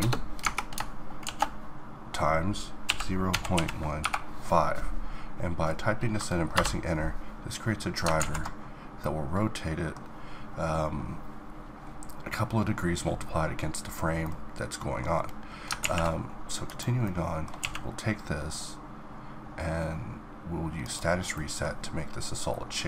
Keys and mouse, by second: 8.2 alt+a, 9.2-12.5 middle drag, 14.2-15.8 middle drag, 15.8 alt+a, 17.6 q, 21.3-22.8 middle drag.